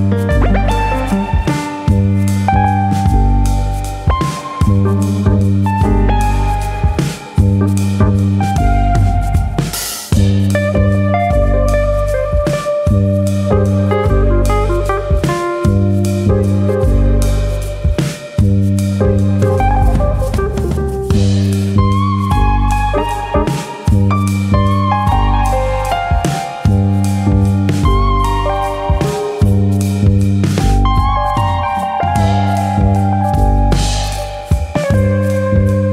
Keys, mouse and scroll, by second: 0.2 scroll down 3, 0.4 Tab, 0.6 middle click, 1.2 middle click, 1.5-2.0 scroll up 2, 1.7 Tab, 2.0 shift+middle click, 2.3 shift+middle click, 2.5 click, 2.7 middle click, 3.5 click, 4.2 middle click, 4.9 click, 5.9 middle click, 6.6 click, 7.2 middle click, 7.5 click, 7.7 middle click, 8.4 click, 9.0-9.6 scroll down 2, 9.3 middle click, 9.7 click, 9.9 middle click, 10.4-11.5 scroll down 3, 10.7 middle click, 11.5 alt+click, 14.4 ctrl+b, 17.3 right click, 21.6 ctrl+b, 24.4 click, 24.6 middle click, 25.0 shift+middle click, 25.3 middle click, 26.1 alt+click, 26.4 middle click, 27.3 g, 28.7 click, 28.9 middle click, 30.0 click, 30.6 ctrl+click, 31.4 g, 32.6 click, 33.4 click, 33.9 ctrl+click, 34.0 ctrl+click, 34.7 g, 35.5 click, 35.7 middle click.